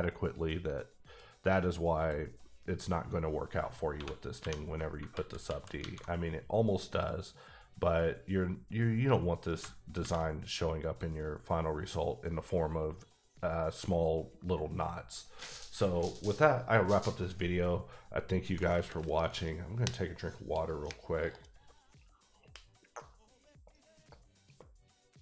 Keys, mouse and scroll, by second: 2.0 scroll down 1, 2.2 click, 3.8 ctrl+1, 4.0 ctrl+1, 4.4 ctrl+2, 5.1 alt+z, 5.4 alt+z, 5.8 alt+a, 9.5 a, 10.0 alt+v, 10.8 click.